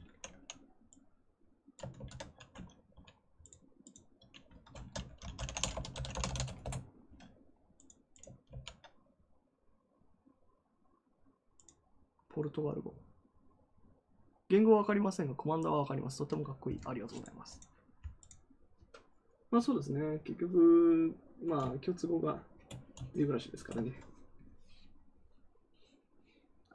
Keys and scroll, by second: 1.9 ctrl+c, 4.7 ctrl+a, 5.0-6.7 typing, 8.4 ctrl+v.